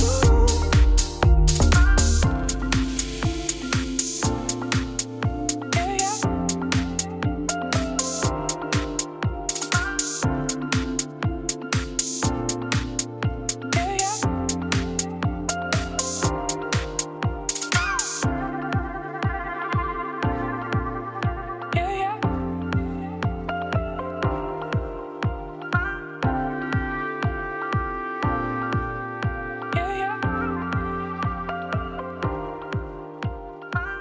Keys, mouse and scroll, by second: 0.2 KP_1, 0.7 scroll up 1, 1.1 e, 3.5 right click, 3.8 2, 4.0 click, 5.3-6.5 right drag, 6.5-8.3 drag, 8.3 1, 8.9 click, 9.2 g, 10.6 click, 10.8 g, 15.7 click, 16.4 shift+d, 18.8 click, 18.9 x, 19.8 click, 20.1 g, 22.0 alt+click, 22.3 f, 23.1 Tab, 23.4 Tab, 23.7 middle click, 24.0 scroll down 2, 24.2 middle click, 24.4 e, 25.2 middle click, 26.2 scroll up 1, 26.4-27.5 middle drag, 27.5 Tab, 27.6 click, 29.8 middle click, 30.2 Tab, 30.3 s, 32.6 middle click, 33.0 s.